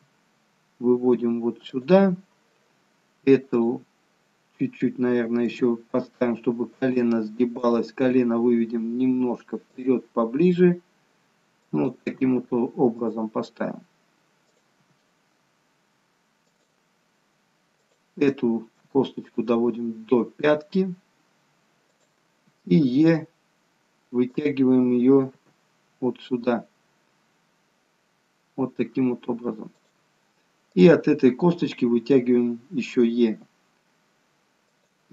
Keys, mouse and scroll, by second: 3.5 click, 5.4 g, 7.5 click, 7.9 g, 11.9 click, 12.2 g, 14.6 click, 14.8 g, 18.9 g, 22.4 g, 25.3 e, 30.7 click, 33.4 e.